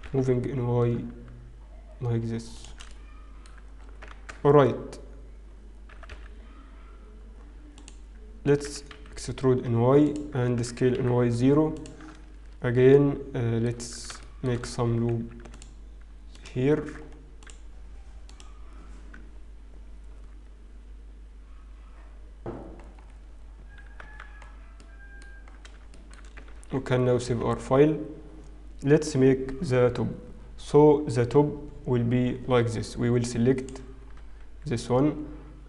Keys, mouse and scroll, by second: 2.6 shift+g, 3.3 middle click, 4.8-7.0 scroll down 5, 4.8 shift+z, 7.0 g, 10.3 e, 11.5 s, 12.6 Tab, 13.8 Tab, 13.8 middle click, 13.8-14.1 scroll up 3, 14.6 shift+middle click, 14.6 scroll up 2, 15.4 ctrl+r, 16.7 ctrl+r, 23.3-25.0 scroll down 10, 25.0 Tab, 25.0 middle click, 25.0-25.8 scroll down 2, 25.9 shift+middle click, 26.8 ctrl+s, 28.8 ctrl+s, 32.8-35.4 scroll up 4, 35.4 Tab, 35.4 click, 35.4 scroll up 1.